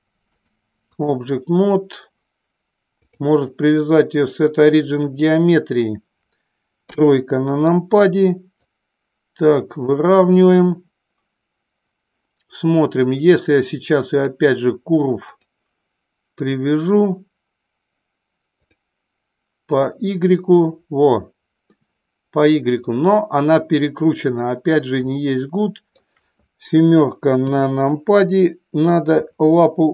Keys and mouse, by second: 0.4-1.0 drag, 3.0-5.1 drag, 6.9 KP_3, 8.7-9.8 drag, 12.9-14.3 drag, 18.7-19.9 drag, 21.7-22.8 middle drag, 24.2 click, 25.0-25.9 middle drag, 27.4 KP_7, 29.1 r.